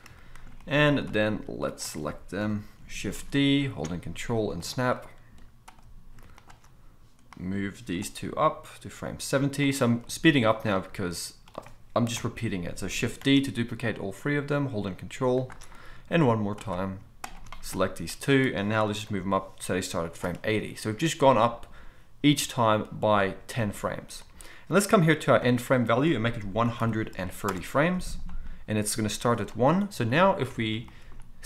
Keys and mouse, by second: 1.1-4.7 drag, 2.4 KP_7, 3.2 shift+d, 4.7-6.3 ctrl+middle drag, 6.3 shift+click, 6.4 shift+middle click, 7.3-9.7 drag, 8.3 g, 9.7 middle click, 10.6-15.5 drag, 12.2 KP_7, 13.3 shift+d, 15.5-16.5 ctrl+middle drag, 16.5 click, 16.6-17.2 middle drag, 17.2 shift+click, 17.3 shift+middle click, 18.1-20.2 drag, 19.0 g, 20.2-25.4 middle drag, 25.4-31.4 drag, 30.5 alt+a.